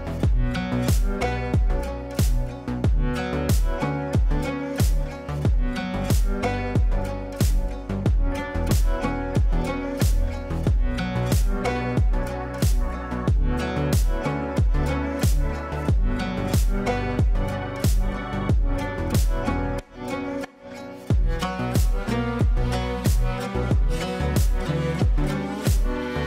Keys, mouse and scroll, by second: 0.6 click, 1.0 F3, 1.5 F2, 1.7-3.2 drag, 3.2 F3, 4.1 F2, 4.5-7.5 drag, 9.7 l, 10.5 click, 10.9 F3, 11.3 F2, 12.0 click, 12.8 click, 13.4 ctrl+z, 13.9 click, 14.4 shift+click, 15.4-19.4 shift+drag, 21.3 l, 22.5 click, 24.8 shift+click, 25.6 e.